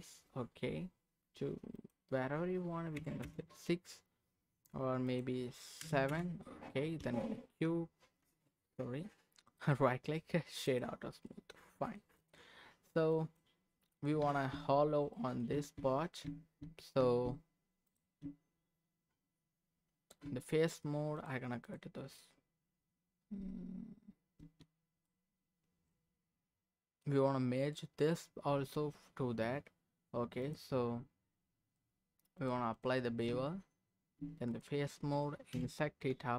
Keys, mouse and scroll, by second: 1.7-3.3 drag, 5.0-6.2 drag, 7.0 q, 9.6-10.9 right drag, 11.0-12.0 middle drag, 11.0 scroll down 1, 12.2 click, 13.1 click, 13.6-14.0 scroll up 2, 14.0 click, 14.2 Tab, 15.1 middle click, 15.5 Tab, 16.2 Tab, 17.0 Tab, 17.9 click, 18.2 Tab, 18.3 Tab, 21.6 click, 22.2-24.4 scroll down 1, 24.4 Tab, 25.0-27.1 middle drag, 30.4-31.4 drag, 32.4 click, 33.3 Tab, 34.5 click, 35.5 i.